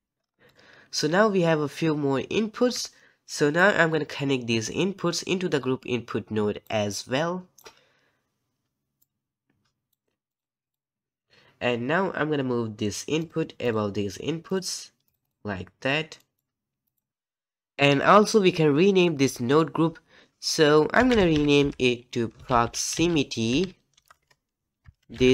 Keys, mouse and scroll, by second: 6.6-7.0 drag, 9.9 click, 10.6 ctrl+z, 10.9 click, 13.2-17.1 drag.